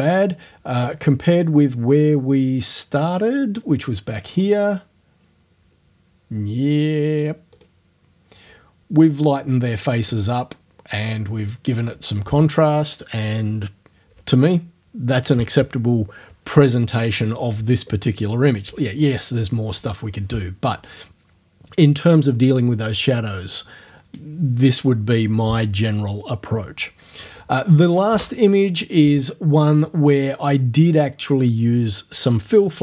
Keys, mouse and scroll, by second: 4.4 click, 7.5 click, 28.1 space.